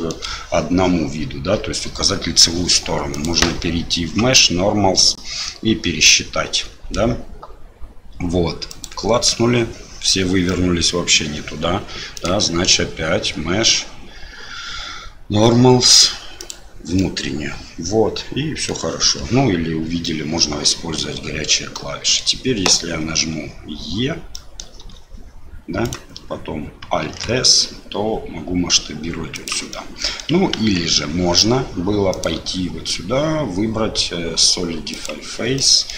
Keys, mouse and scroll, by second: 3.2-10.4 drag, 10.4 middle click, 12.1-16.5 drag, 16.9-18.7 middle drag, 20.0 middle click, 21.7 middle click, 24.3 middle click, 24.8 e, 27.0 alt+s, 29.7 middle click, 30.5 ctrl+z, 32.1-35.5 drag, 35.5 middle click.